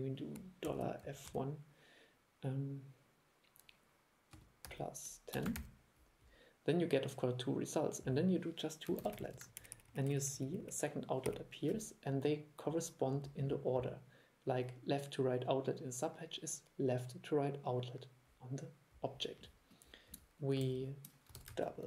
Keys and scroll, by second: 9.1 super+c, 9.3 super+v, 20.8 super+e, 21.5 super+c, 21.6 super+v.